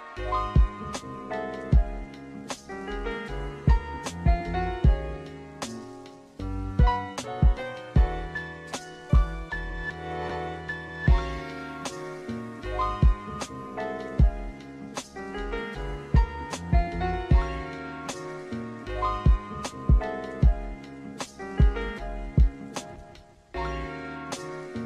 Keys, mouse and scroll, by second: 1.7-5.7 drag, 3.9 KP_0, 6.0-8.5 drag, 11.2 click, 13.1 click, 15.6 space, 20.9 space, 22.6 shift+Left.